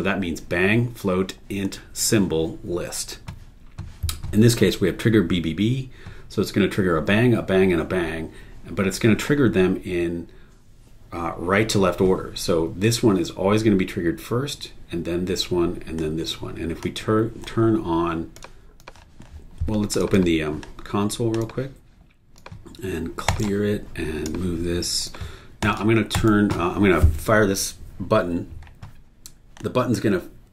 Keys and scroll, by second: 26.1 super+e.